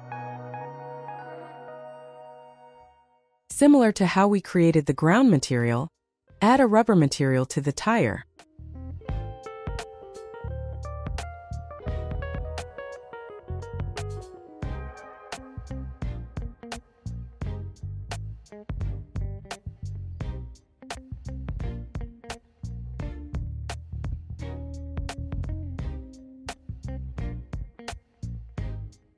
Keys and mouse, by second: 0.3 click, 1.7 ctrl+t, 3.3 click, 8.0 ctrl+click, 8.8 click, 10.7 click, 14.1 click, 14.4 click, 15.2 shift+d, 16.9 click, 18.7 Tab, 20.1 click, 21.8-23.5 drag, 25.8 click, 28.0 click.